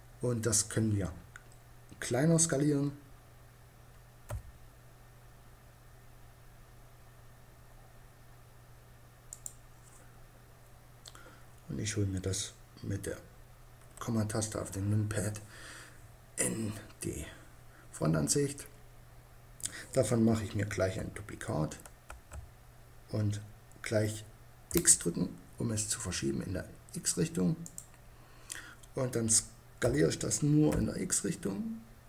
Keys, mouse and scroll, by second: 3.8 s, 8.9-10.6 drag, 13.2 KP_Decimal, 19.8-21.5 middle drag, 21.5 shift+d, 27.2-29.0 drag, 29.3 s.